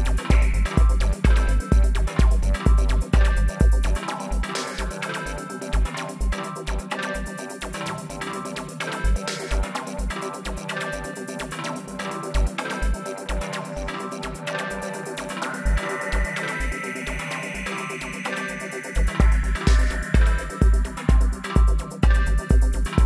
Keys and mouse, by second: 0.0-1.8 drag, 2.0 middle click, 3.1 alt+s, 4.1-5.3 middle drag, 5.3-9.8 right drag, 7.4 z, 8.1 z, 8.5 alt+s, 9.8 middle click, 10.6-12.4 drag, 12.4-13.6 middle drag, 13.9-16.5 middle drag, 18.2 Tab, 20.2 KP_1, 21.6-22.6 middle drag.